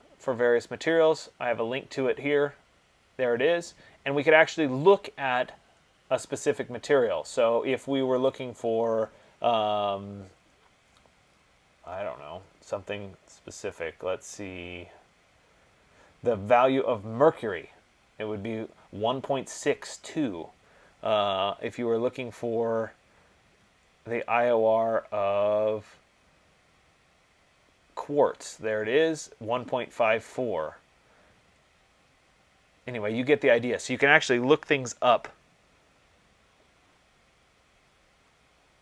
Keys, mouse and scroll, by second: 3.4-4.3 scroll, 4.3-4.8 scroll, 5.0-7.4 scroll, 7.4-8.0 scroll, 8.0-10.3 scroll, 10.3-10.8 scroll, 11.4-12.2 scroll, 12.2-13.2 scroll, 13.2-18.4 scroll, 22.1-28.8 scroll, 22.3 middle click, 30.7-31.5 scroll, 31.5 middle click, 31.6 middle click, 32.6 middle click, 33.6 middle click, 33.7 middle click, 33.9 middle click, 35.2 middle click, 35.3 middle click, 37.4 middle click, 37.5 middle click, 37.7 middle click.